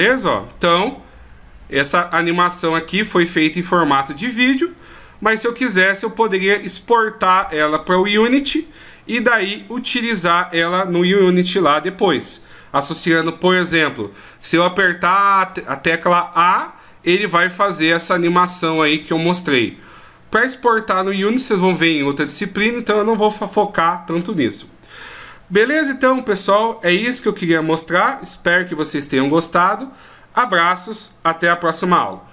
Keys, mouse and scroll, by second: 11.9 F11.